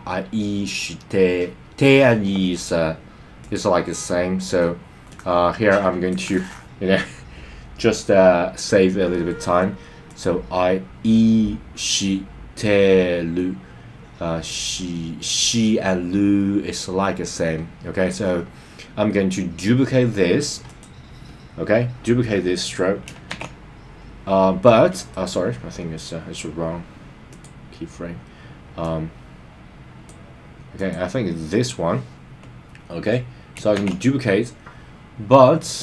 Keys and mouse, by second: 3.4 click, 5.1-6.1 drag, 10.0 click, 20.6 click, 23.3 shift+d, 25.1 right click, 27.3 click, 28.8-30.1 drag, 30.7 click, 33.7 shift+d.